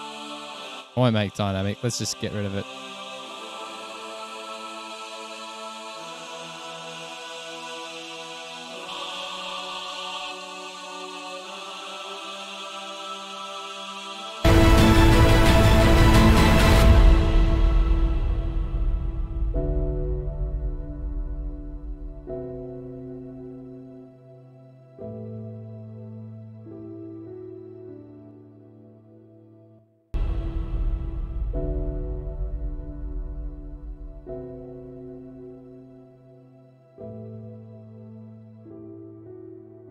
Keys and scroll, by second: 19.0 super+=, 20.7 super+a, 22.0 super+[, 22.1 super+[, 30.8 super+], 30.9 super+], 31.1 super+], 32.1 F8, 38.2 F7, 38.9 s.